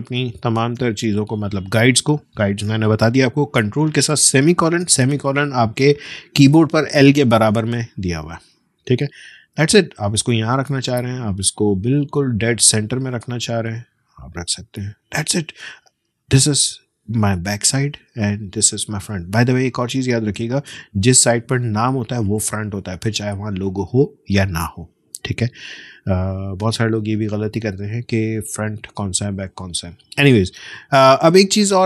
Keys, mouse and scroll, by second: 1.1-1.5 alt+scroll down 1, 1.7 space, 1.9 click, 2.2 space, 4.5 ctrl+;, 8.2 space, 8.5 click, 8.7 space, 10.7-13.7 drag, 15.7-16.6 alt+scroll up 1, 17.5 space, 17.8 click, 17.9 space, 20.2 click, 20.4 space, 25.8-26.9 alt+scroll down 1, 27.3 space, 27.5 click, 27.8 space.